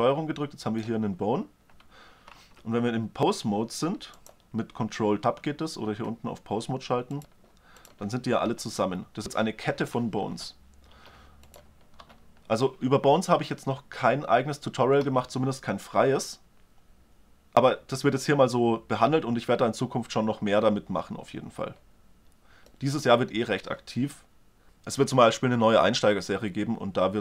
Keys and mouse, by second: 2.2 ctrl+Tab, 4.7 click, 6.8-8.2 drag, 8.2 e, 8.6 r, 9.3 click, 11.3-13.1 drag, 11.8 r.